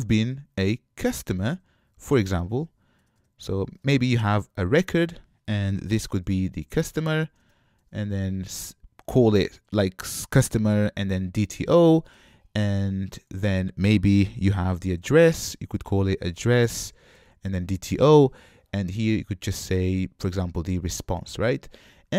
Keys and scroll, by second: 12.9 Escape, 22.0 super+z.